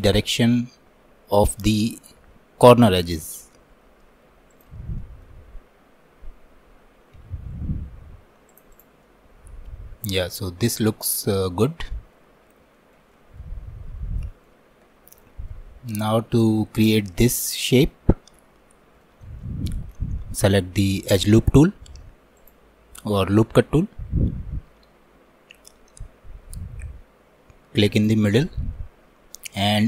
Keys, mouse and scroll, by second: 5.0-7.2 alt+middle drag, 7.2 s, 9.1-12.8 middle drag, 13.2 alt+middle click, 13.8 scroll up 1, 14.2 shift+middle click, 14.6-15.3 scroll down 7, 15.3 shift+middle click, 15.7-16.0 scroll up 1, 18.1 scroll up 2, 18.1 shift+middle click, 18.6-19.1 scroll up 4, 19.1-22.4 shift+middle drag, 22.4-29.8 drag.